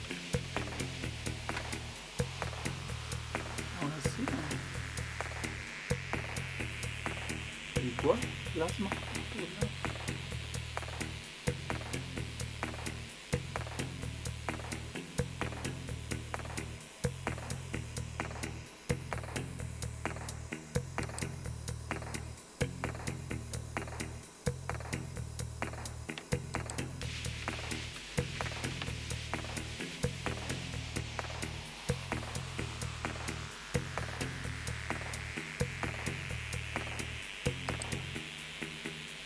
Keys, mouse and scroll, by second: 0.4-1.5 typing, 21.0 click, 26.5 click, 28.2-28.7 typing, 34.2 Return, 37.7 click.